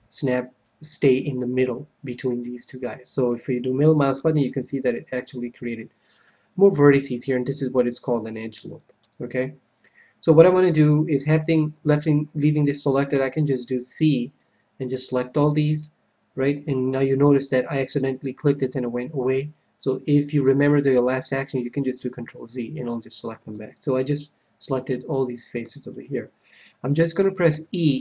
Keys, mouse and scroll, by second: 2.8-4.4 middle drag, 9.0 KP_1, 10.0-11.9 middle drag, 13.1 c, 15.6-17.5 right drag, 21.8 ctrl+z, 23.5-26.8 middle drag, 25.7 KP_1, 27.4 e.